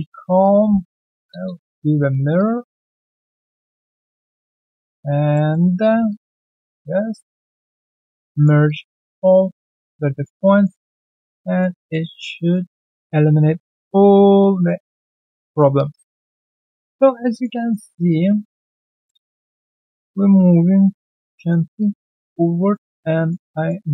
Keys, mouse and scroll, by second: 1.0 -, 1.3 Return, 2.3 shift+click, 2.9 ctrl+alt+c, 3.1 alt+q, 3.4 right click, 5.5 alt+middle click, 6.0 ctrl+shift+click, 6.4 alt+middle click, 6.8 shift+right click, 8.0 alt+middle click, 8.3 alt+right click, 8.6 alt+click, 9.0 right click, 9.4 alt+click, 9.7 alt+middle click, 9.9 alt+right click, 10.1 alt+click, 10.4 alt+middle click, 10.9 ctrl+1, 11.2 alt+click, 11.4 alt+right click, 11.8 alt+middle click, 12.1 right click, 12.9 alt+click, 13.2 alt+right click, 13.6 alt+middle click, 14.2 alt+right click, 14.5 alt+middle click, 15.1 scroll down 1, 15.4 alt+click, 15.7 alt+click, 16.3 alt+right click, 16.5 alt+click, 17.1 alt+right click, 17.3 alt+click, 17.5 alt+middle click, 17.9 alt+click, 18.6 alt+middle click, 18.9 alt+click, 19.3 alt+middle click, 19.6 alt+click, 21.3 alt+middle click, 21.8 alt+click, 22.6 alt+right click, 22.9 alt+middle click, 23.2 alt+right click, 23.4 alt+click, 23.8 alt+middle click.